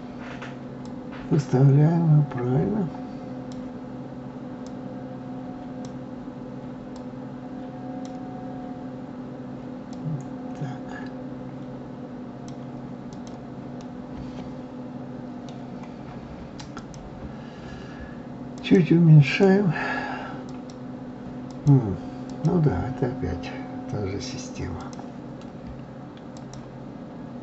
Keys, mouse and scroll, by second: 0.8-3.8 drag, 4.6-12.9 drag, 13.1 click, 13.8-16.7 middle drag, 16.7 click, 18.5-20.7 drag, 21.5 click, 22.3 click, 24.8 click, 26.3-27.4 drag.